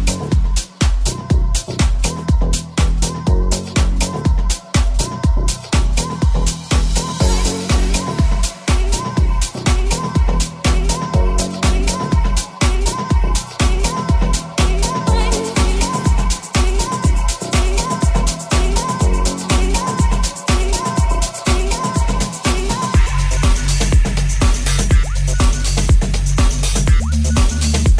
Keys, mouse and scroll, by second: 3.0 g, 3.0 r, 6.4-10.8 middle drag, 6.8 right click, 8.9 r, 10.4 r, 10.8 right click, 10.8-13.0 middle drag, 12.1 ctrl+c, 13.0 ctrl+right click, 13.2 ctrl+c, 13.9 ctrl+v, 14.8 ctrl+right click, 15.3 ctrl+v, 15.7 middle click, 16.9-20.0 middle drag, 20.0-23.5 drag, 20.0 0, 20.4 middle click, 20.4 right click, 23.5-27.9 middle drag, 23.5 g, 23.5 r, 24.5 g, 26.1 r, 26.7 g, 27.5 r.